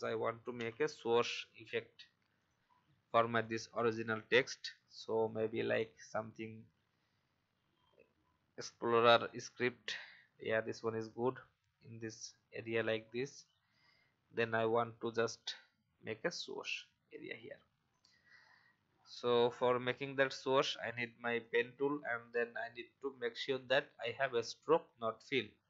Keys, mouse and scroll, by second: 0.5 shift+o, 2.4 click, 5.4-5.7 typing, 9.2 click, 10.2 alt+scroll up 1, 10.9-13.5 drag, 15.0 alt+scroll down 1, 17.1-17.4 alt+scroll up 1, 17.9 click, 18.3-18.7 alt+scroll up 1, 18.9 scroll down 1, 19.5-21.4 drag, 23.5 shift+x.